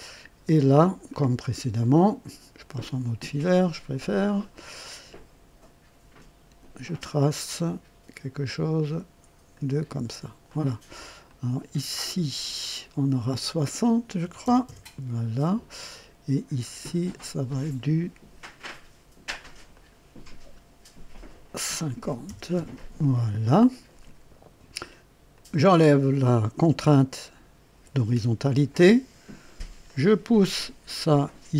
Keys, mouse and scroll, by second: 0.5-1.1 scroll up 1, 1.1-1.8 right drag, 4.1 click, 6.1 click, 9.5 click, 10.4 right click, 11.2 click, 12.5 click, 14.2 KP_6, 14.4 KP_0, 14.6 KP_Enter, 17.5 click, 19.7 click, 22.0 KP_5, 22.2 KP_0, 22.5 KP_Enter, 25.3 click, 27.7 Delete, 29.8-31.5 drag.